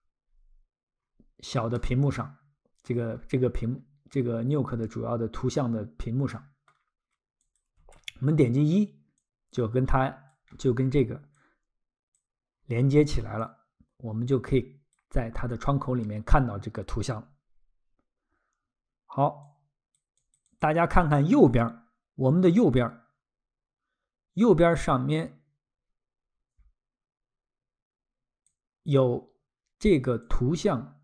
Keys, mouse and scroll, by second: 0.3-0.9 scroll, 1.8 middle click, 3.2 scroll, 6.3 middle click, 7.4 click, 7.8 1, 9.2 click, 10.5-10.9 scroll, 11.3 click, 12.5-13.0 scroll, 13.4 click, 17.5-18.2 scroll, 19.4 click, 20.2 click, 20.6 click, 28.5 click, 30.3 click.